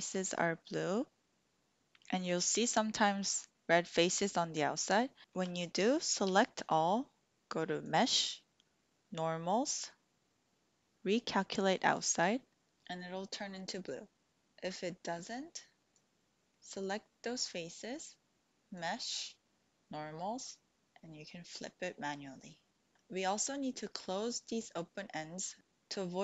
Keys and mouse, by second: 0.2 click, 0.6 middle click, 5.2 shift+click, 5.2 shift+middle click, 6.3 a, 9.1-12.0 drag, 14.2 ctrl+z, 16.0 click, 18.7-21.6 right drag.